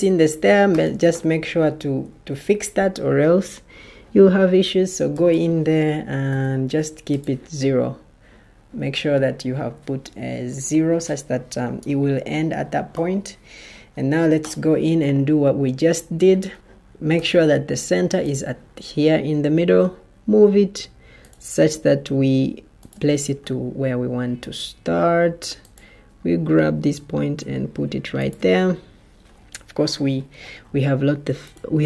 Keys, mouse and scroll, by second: 0.7 Escape, 1.9 ctrl+t, 6.2 0, 16.5 Escape, 17.1 ctrl+t, 19.6 ctrl+d.